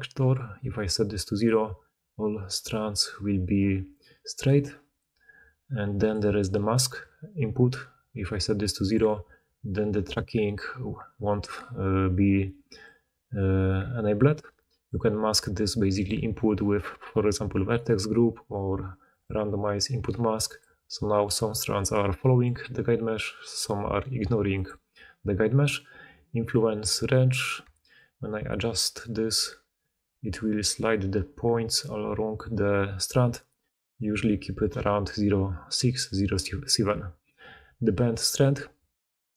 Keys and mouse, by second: 0.6-19.2 drag, 28.2-39.3 shift+drag.